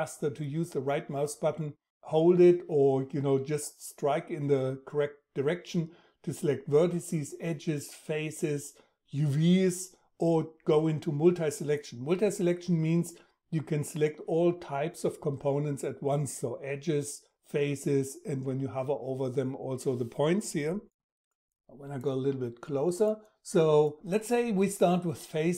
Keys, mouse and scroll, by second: 0.0-6.2 right drag.